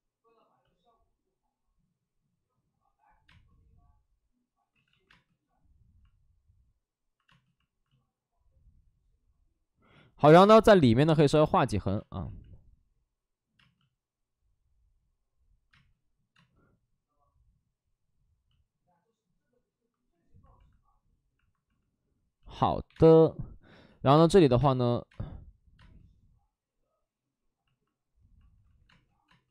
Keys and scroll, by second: 4.6 ctrl+z, 5.0 space, 10.1 5, 10.2 space, 12.1 ctrl+z, 13.5 space, 21.5 space, 22.7 1, 22.8 space, 23.8 x, 24.0 space, 28.5 ctrl+z, 28.8 space.